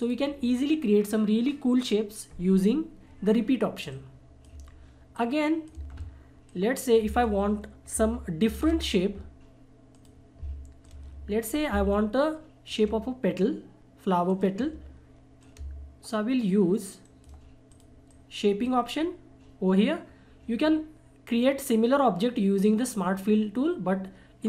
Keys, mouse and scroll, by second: 0.0 click, 3.9 click, 4.5 Delete, 5.1 click, 5.7 Delete, 6.5 click, 7.0 Delete, 8.4 shift+F4, 9.9-17.0 drag, 17.0 shift+right click, 17.7-21.2 drag.